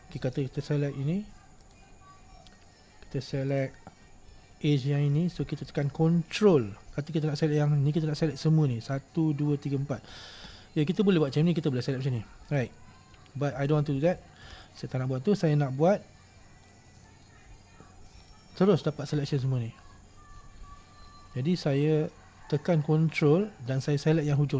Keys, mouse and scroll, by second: 1.7 click, 3.6 click, 5.4-11.3 middle drag, 11.3 shift+right click, 12.0 shift+right click, 12.6 shift+right click, 13.8 ctrl+z, 14.2 ctrl+z, 14.6 ctrl+z, 15.9-16.4 scroll down 1, 16.4-16.9 scroll up 1, 16.9-24.5 middle drag.